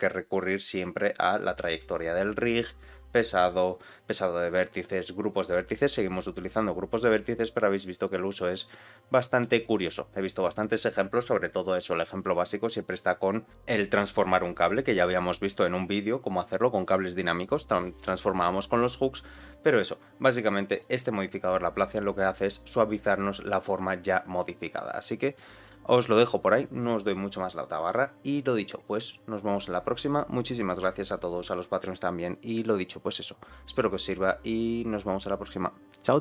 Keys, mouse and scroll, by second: 8.2 click, 8.8 click, 9.4 g, 20.6 click.